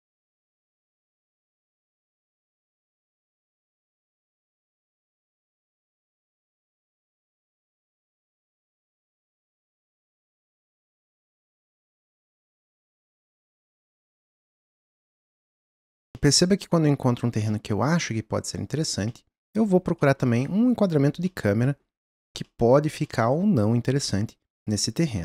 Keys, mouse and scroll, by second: 1.8 scroll down 2, 1.9 middle click, 2.4-5.1 drag, 5.1 middle click, 5.7 click, 6.4-7.4 middle drag, 7.6-9.1 ctrl+middle drag, 9.2-14.5 ctrl+shift+middle drag, 14.5-15.5 drag, 15.7-25.2 middle drag.